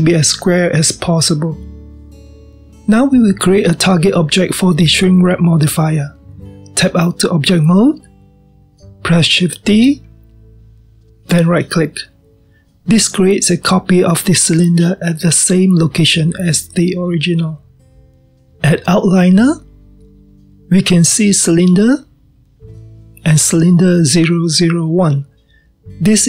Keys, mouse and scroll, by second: 5.8-7.8 scroll down 2, 7.8 Tab, 10.6 shift+d, 23.3 click, 25.6 click.